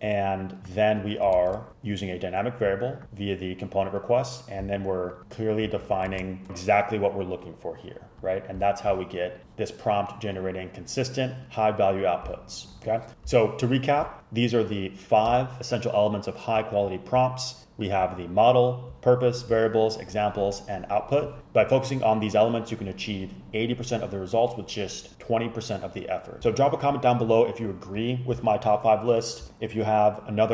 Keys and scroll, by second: 1.4 shift+super+Left, 5.9 super+Right, 6.2 shift+super+Left, 15.6 Left.